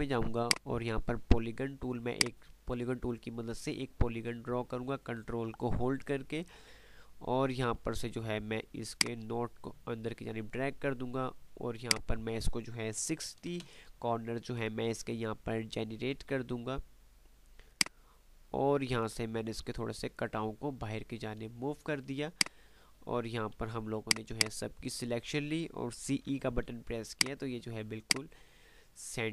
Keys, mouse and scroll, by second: 9.0-10.9 drag, 12.0-12.7 ctrl+drag, 17.7-21.1 ctrl+drag, 23.1 F3, 24.0-25.3 drag, 26.2-26.9 typing, 27.4 click, 27.7 F2, 28.3 click, 28.6 F2.